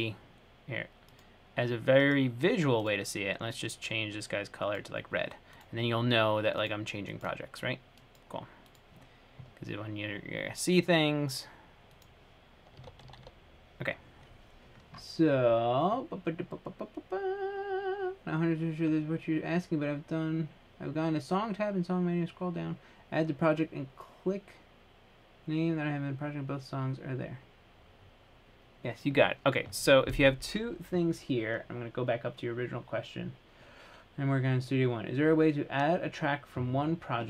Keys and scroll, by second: 13.0-13.4 typing.